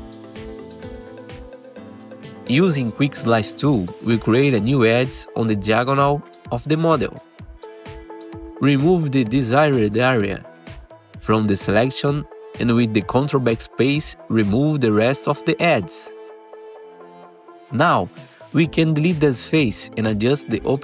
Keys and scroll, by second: 2.5-3.4 typing, 6.3 2, 15.6 ctrl+BackSpace, 17.0 4, 17.4 F3, 18.5 Delete, 19.7 F3, 19.9 F3, 20.3 F3, 20.7 Delete.